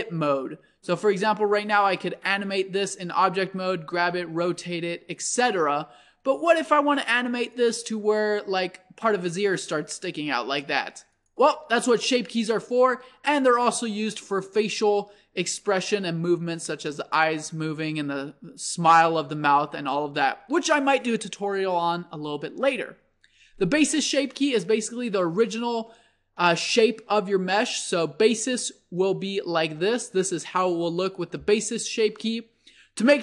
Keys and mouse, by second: 2.1 g, 3.9 r, 6.4 Tab, 7.5-9.1 drag, 8.3 g, 11.6 Tab, 28.0-33.2 middle drag.